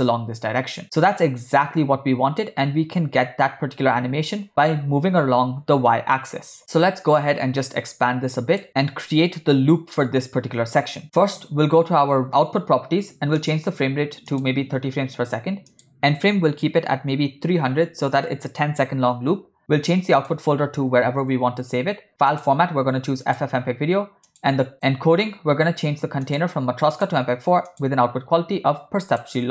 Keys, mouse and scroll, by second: 1.1-4.3 shift+drag, 7.3-8.6 drag, 11.0 Right, 12.4 click, 13.5-14.5 drag, 15.8-18.2 drag, 17.9 0, 19.5-19.9 scroll down 4, 20.2-21.4 drag, 21.1 /, 22.4-23.5 drag, 24.3 click, 24.7-25.4 scroll down 7, 26.3-27.2 drag, 27.9-29.4 drag.